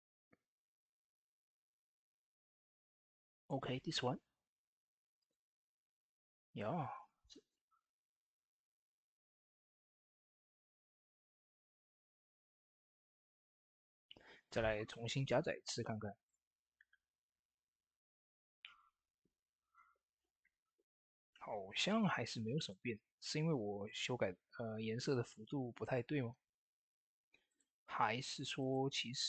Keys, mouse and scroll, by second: 3.1 click, 3.1 click, 10.0-21.7 drag, 27.3 click, 27.4-29.2 drag.